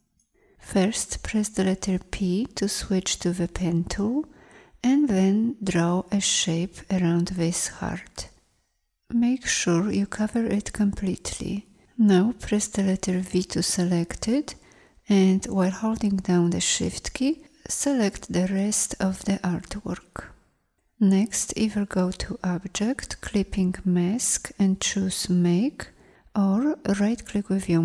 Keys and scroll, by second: 1.6 p, 13.2 v.